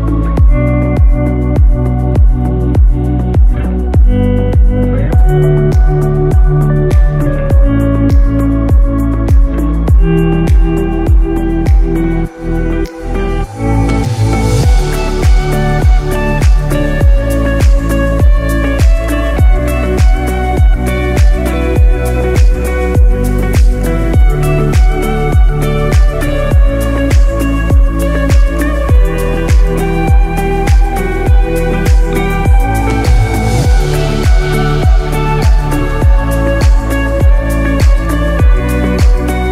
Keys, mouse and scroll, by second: 0.8 shift+middle click, 0.8 scroll up 4, 1.8 scroll up 1, 2.3 middle click, 5.3 click, 8.3-8.8 scroll down 5, 8.7 middle click, 9.6-10.0 scroll down 2, 10.6 scroll down 1, 10.7 shift+middle click, 11.2-11.7 scroll up 1, 11.8 scroll down 2, 12.6 KP_7, 13.2-14.1 scroll up 8, 16.2 shift+a, 21.7 scroll down 3, 22.1 middle click, 23.2 scroll down 3, 24.1 KP_1, 24.5-25.0 scroll up 2, 25.1 scroll down 2, 25.7 g, 28.5-29.1 scroll up 6, 29.5 shift+middle click, 30.4 scroll up 2, 30.8 shift+middle click, 33.1 s.